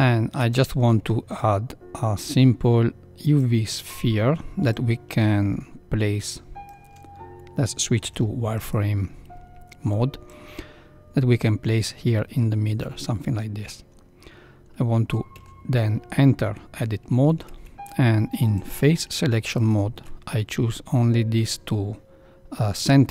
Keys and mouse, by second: 0.3 shift+a, 4.7-6.6 drag, 8.0 z, 10.3-11.3 drag, 15.3 Tab, 17.3 ctrl+3, 18.5 alt+click.